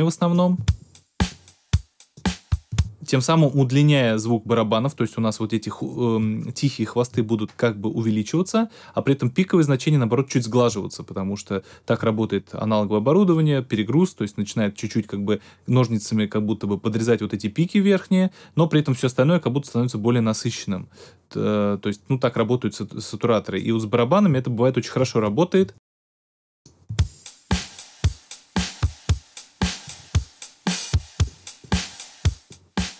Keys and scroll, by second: 0.5 space, 2.6 space, 25.7 space, 26.8 space.